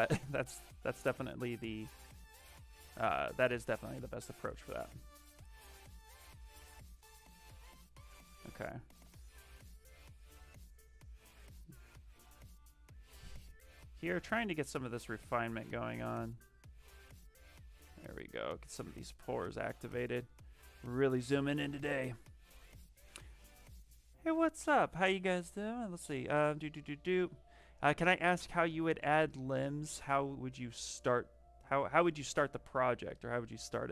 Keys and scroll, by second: 8.9 s, 33.8 s.